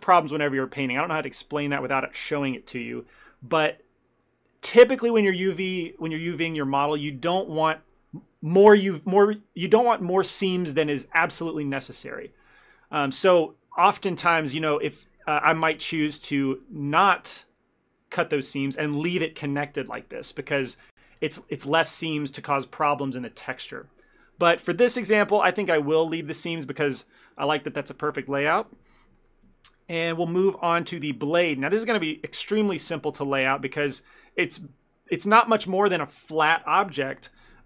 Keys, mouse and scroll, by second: 15.3 ctrl+middle click, 15.7 middle click, 16.6 ctrl+z, 25.4 ctrl+shift+z, 28.9 ctrl+middle click, 29.2 shift+middle click, 29.5 Tab, 29.7 middle click, 30.4 click, 30.8 ctrl+middle click, 31.0 shift+middle click, 31.5 Tab, 33.7 ctrl+middle click, 34.0 ctrl+middle click.